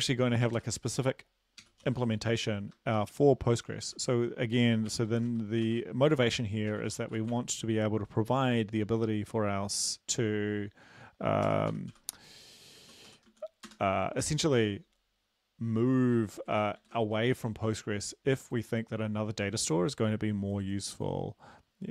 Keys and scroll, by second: 0.0-2.1 typing, 3.6-7.3 typing, 11.5-11.9 typing, 13.0-13.3 typing, 13.7 Return, 14.6 ctrl+v, 16.6 Up, 16.8 shift+End, 17.2 ctrl+x.